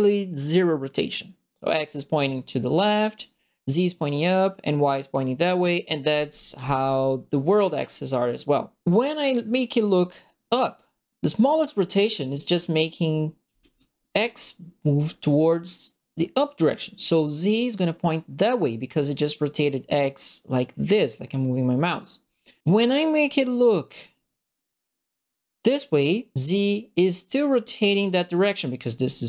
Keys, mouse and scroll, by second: 9.3-12.2 right drag, 13.1 right click, 13.4 s, 22.6-26.7 drag.